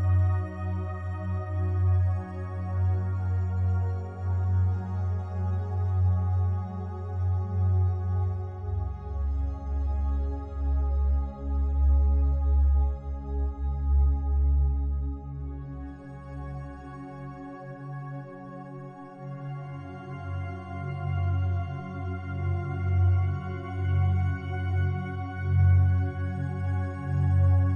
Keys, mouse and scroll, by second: 0.9 a, 1.1 alt+click, 2.6 right click, 3.6 3, 4.2 right click, 4.7 shift+right click, 8.3-12.9 drag, 12.9-19.4 alt+drag, 19.4 x, 20.3 click, 21.6 2, 23.8 alt+shift+right click, 24.7 f, 25.6 a, 26.8-27.7 alt+drag.